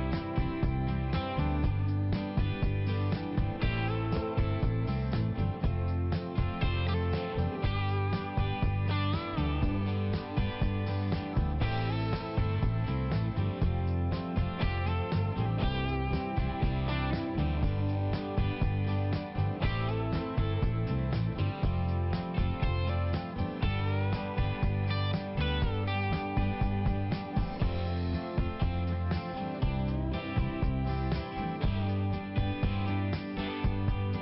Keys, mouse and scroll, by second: 0.0 click, 0.2 click, 0.4 double click, 0.6 double click, 1.0 click, 1.2 click, 1.5 click, 1.6 double click, 1.8 double click, 2.3 double click, 3.8 click, 4.0 click, 4.2 click, 4.3 double click, 4.6 double click, 5.8 click, 6.3 click, 6.4 click, 6.8 click, 6.9 double click, 7.4 typing, 13.1 click, 16.1 click, 17.5 typing, 18.9 click, 18.9 typing, 19.8 click, 20.3 click, 20.9 click, 21.0 click, 21.5 click, 22.3 click, 22.5 double click, 22.8 double click, 23.4 click, 24.1 click, 24.2 click, 24.6 click, 24.8 click, 25.3 click, 25.7 click, 26.4 click, 26.5 click, 26.8 click, 26.9 double click, 27.8 double click, 28.3 double click, 28.4 double click, 28.7 double click, 28.8 double click, 29.4 click, 29.8 click, 30.1 click, 30.2 double click, 30.6 double click, 32.0 click, 32.2 click, 32.5 click, 32.6 double click, 33.0 double click, 33.8 click.